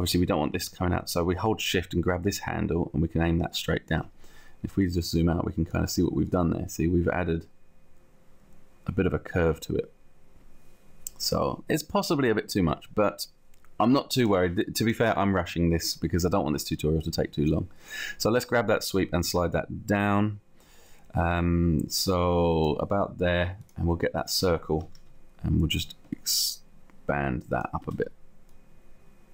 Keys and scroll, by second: 25.1 t, 26.2 t, 27.8 space, 28.7 space.